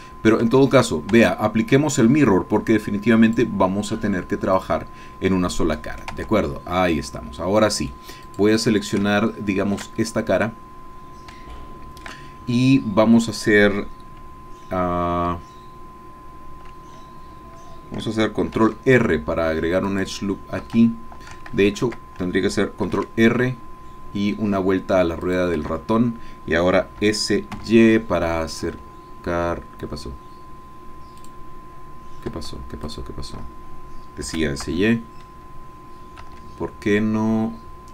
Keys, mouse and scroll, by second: 0.0 click, 0.5 Tab, 1.3 Tab, 3.2 click, 4.6 click, 5.8 click, 6.2 Tab, 7.0-8.1 drag, 8.2 click, 9.1 shift+click, 10.0-12.2 shift+drag, 18.6 ctrl+r, 19.9 click, 20.7 Escape, 21.8 ctrl+z, 22.9 ctrl+r, 24.0 scroll up 1, 25.2 click, 25.6 Escape, 27.0 s, 27.6 y, 28.6 Escape, 31.2 click, 32.8 shift+click, 34.2 s, 34.6 y, 36.2 Escape.